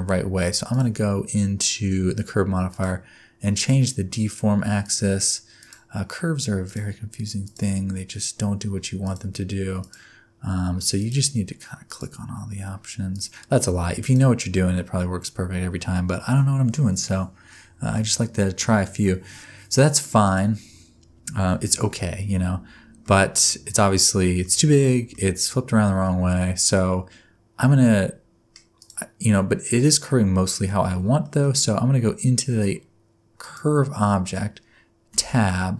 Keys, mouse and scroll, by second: 0.7 click, 2.7 click, 4.8 click, 6.7 click, 9.0 click, 11.0 click, 13.1 click, 14.8 middle click, 18.6 middle click, 20.2 click, 23.0 middle click, 24.8 middle click, 26.0 middle click, 28.8 click, 31.2 middle click, 33.4 click, 35.1 Tab.